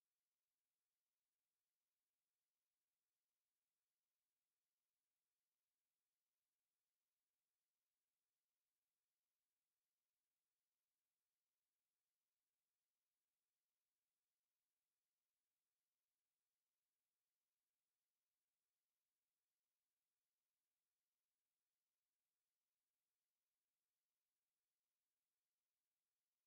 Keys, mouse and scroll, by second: 0.2 click, 2.7 click, 6.3 click, 9.1 space, 10.7 space, 11.6 click, 12.4 space, 13.5-15.0 drag, 13.5 space, 17.2 click, 17.6 space, 18.8 KP_1, 20.6-21.6 right drag, 24.0 click.